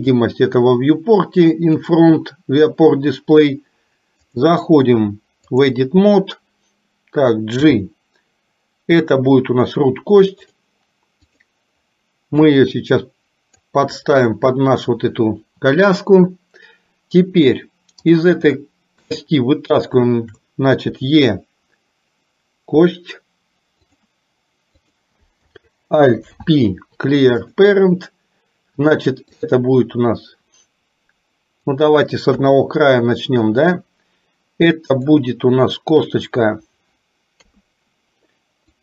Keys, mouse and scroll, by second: 0.1 click, 1.8 click, 4.3-5.7 drag, 7.7 g, 11.3 click, 12.5-13.7 drag, 18.6 shift+middle click, 21.0 e, 26.2 alt+p, 29.5-31.8 drag, 32.3 KP_1, 33.8-35.2 drag, 37.5 KP_3, 38.7-38.8 drag.